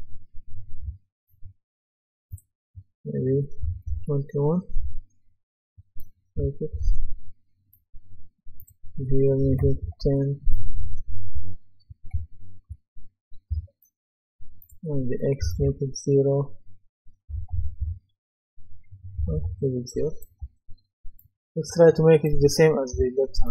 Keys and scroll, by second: 0.0-0.8 typing, 3.6 KP_2, 4.8 Return, 6.4-6.7 typing, 9.4 KP_1, 9.6 KP_0, 9.8 Return, 10.8-13.5 typing, 15.4 KP_0, 15.6 Return, 17.3 KP_1, 17.5 KP_0, 17.8 Return, 19.2 KP_0, 19.3 Return, 20.4 typing, 22.4-22.9 typing.